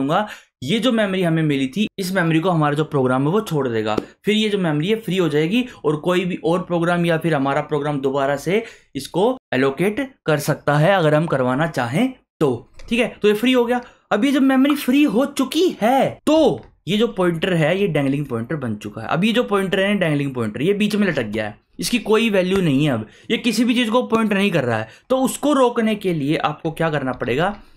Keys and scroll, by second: 16.3 Return, 26.9-27.7 typing.